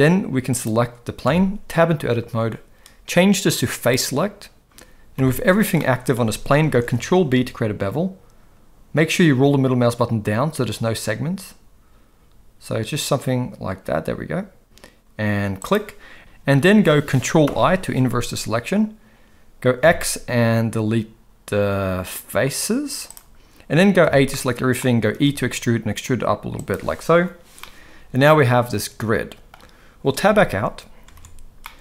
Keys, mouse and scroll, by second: 1.2 Tab, 3.8 click, 5.2 a, 5.8 middle click, 6.8 ctrl+b, 16.2 ctrl+z, 17.4 ctrl+i, 19.8 x, 24.0 a, 24.3 middle click, 25.1 e, 27.6-29.5 middle drag, 30.3 Tab, 31.6 middle click.